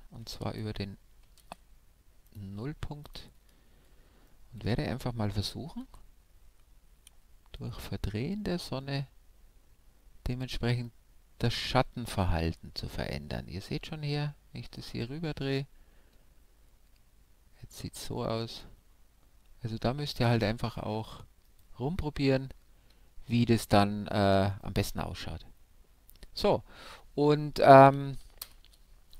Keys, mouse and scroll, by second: 0.4 shift+c, 1.4 shift+c, 1.4 shift+c, 2.2-4.3 drag, 3.6-6.4 middle drag, 5.8 r, 25.9-28.1 middle drag, 28.4 shift+F3.